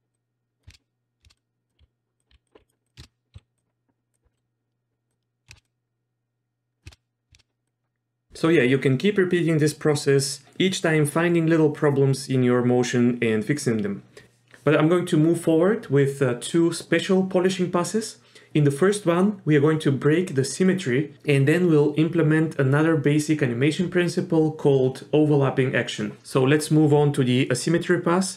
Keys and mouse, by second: 0.1-0.6 drag, 0.7-3.3 typing, 1.3 click, 3.6 drag, 4.3 middle click, 5.5 shift+space, 5.6-6.8 drag, 6.9 shift+space, 7.4 shift+space, 7.7 click.